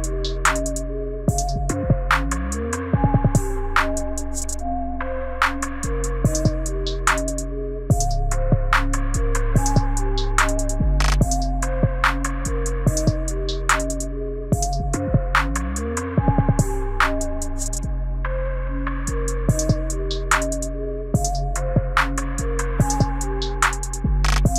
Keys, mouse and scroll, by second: 0.2-0.9 scroll up 5, 0.9 click, 4.0 h, 4.8 click, 6.9 x, 9.1 middle click, 10.2-10.8 scroll down 1, 10.8 space, 12.4-13.2 scroll down 3, 14.7 space, 16.0 space, 18.0 Left, 18.2-18.7 Left, 18.9 Left, 19.1 Left, 23.4 click.